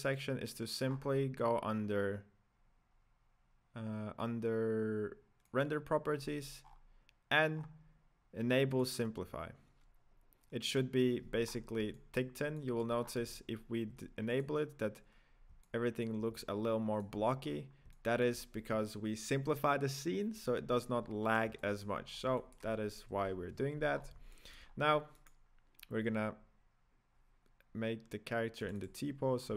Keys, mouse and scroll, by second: 0.8-4.0 scroll up 1, 5.4 click, 6.1-7.5 scroll down 10, 7.5-10.7 scroll down 2, 10.7-11.4 drag, 11.4-11.9 scroll up 4, 11.9-13.0 shift+middle drag, 13.0-14.0 scroll up 7, 14.0-14.6 scroll up 1, 14.6 click, 15.6-17.4 middle drag, 17.4-17.9 scroll down 7, 17.9-20.9 middle drag, 21.0-21.6 scroll down 1, 21.6-22.0 shift+middle drag, 22.0 scroll down 2, 22.4-23.1 middle drag, 23.1 KP_1, 23.9-24.3 scroll up 5, 24.3-24.7 shift+middle drag, 24.7-25.4 scroll down 1, 25.4 right click, 28.6 click, 29.0 drag, 29.3-29.5 scroll up 4.